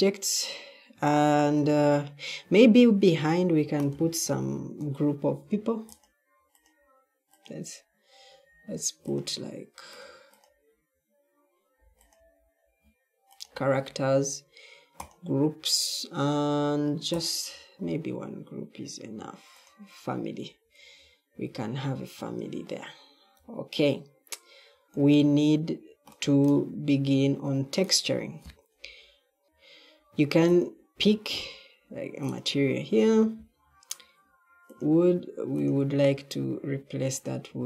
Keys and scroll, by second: 1.5-9.1 typing, 20.6 Escape, 23.3-24.8 typing, 29.4 d.